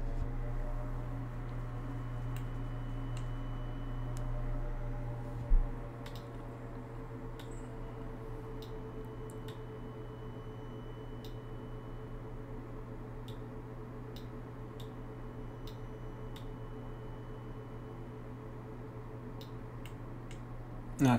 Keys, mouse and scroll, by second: 6.1 click, 7.4-8.6 drag, 9.5-11.2 drag, 13.3 click, 14.8 click, 16.4-19.4 drag, 19.9 middle click.